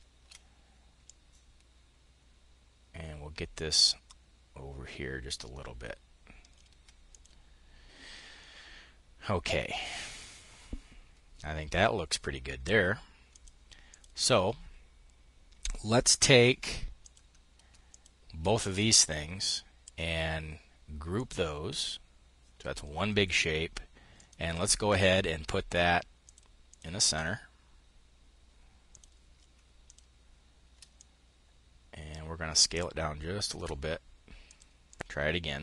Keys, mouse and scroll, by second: 0.5-6.8 ctrl+drag, 12.7-13.7 drag, 16.4 click, 17.3 shift+click, 20.6 click, 23.6 click, 24.3-26.4 drag, 28.4 click, 29.3 click, 30.4-34.0 ctrl+shift+drag, 34.3 click, 35.0-35.6 drag.